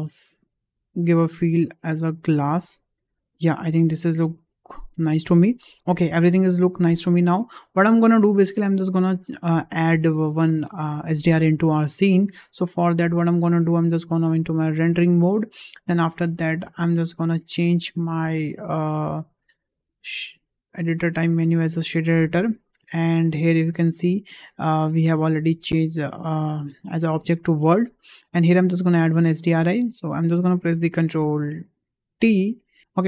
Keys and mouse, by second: 0.8-5.0 drag, 17.1-21.7 drag, 23.3-24.0 drag, 25.0-27.4 drag, 28.4 shift+middle click, 29.1 shift+middle drag, 32.5 ctrl+t.